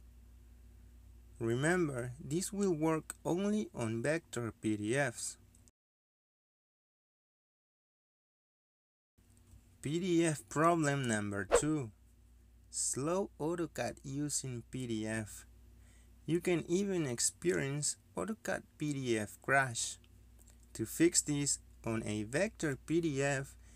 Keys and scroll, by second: 3.5 c, 4.1 Return, 8.3 Delete.